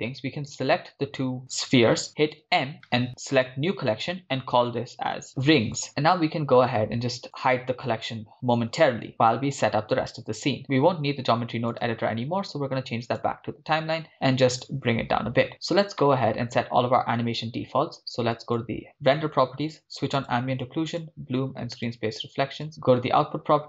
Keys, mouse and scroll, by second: 0.5 shift+right click, 2.3 m, 7.3-9.2 drag, 11.7-14.4 drag, 14.6 click, 16.1-16.6 middle drag, 18.3 click, 20.2 click, 20.9 drag, 21.9 click, 22.7 click.